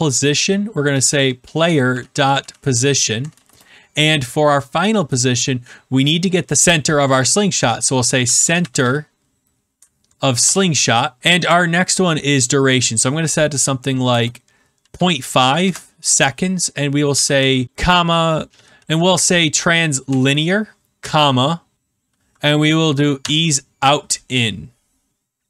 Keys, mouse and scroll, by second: 0.6-3.8 typing, 7.8-9.2 typing, 10.4 Return, 14.5-15.4 typing, 16.8-18.1 typing, 18.6 Down, 19.2 Down, 19.3 Down, 20.0 Return, 20.9 ,, 22.7 Down, 23.1 Return.